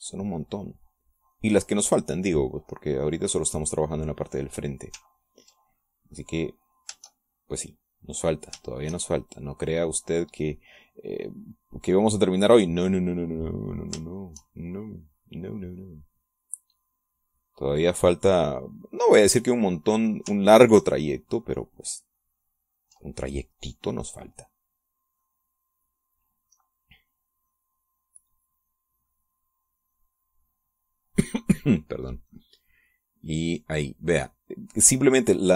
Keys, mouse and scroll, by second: 0.5-2.4 drag, 3.9-5.7 drag, 6.6 ctrl+click, 7.5 click, 8.6-9.8 shift+drag, 9.9-15.8 shift+drag, 16.4-20.9 drag, 21.9 ctrl+click, 22.8-24.4 ctrl+drag, 24.8-31.9 drag, 32.0 click, 33.6-35.5 drag.